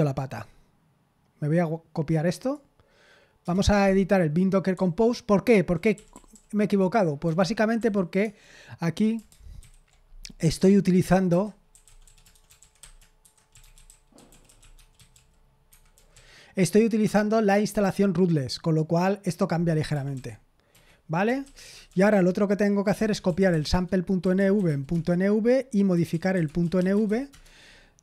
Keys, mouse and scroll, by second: 0.3-3.0 drag, 3.4 Return, 4.7-8.2 typing, 9.6 ctrl+v, 10.7-16.1 typing, 15.6 Escape, 20.1 typing, 20.7 Escape, 21.1-28.0 typing.